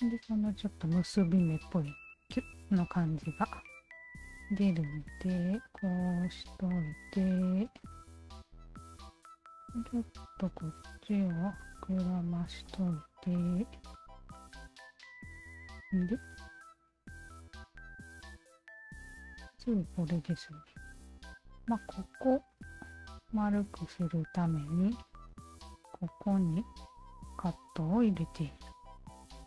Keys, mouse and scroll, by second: 5.2 alt+middle click, 5.7 alt+click, 6.7 alt+click, 7.8 alt+click, 9.1 alt+middle click, 9.6 alt+click, 11.1-12.4 alt+drag, 12.7-13.8 alt+drag, 14.8 alt+right click, 15.1 alt+click, 16.8 alt+click.